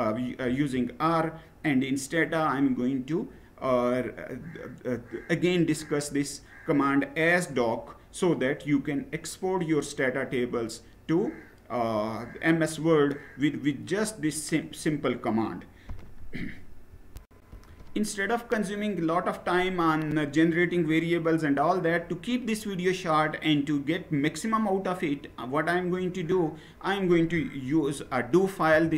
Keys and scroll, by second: 0.1 Down, 16.9 shift+F9, 28.3 Down, 28.6 Down, 28.9 Down.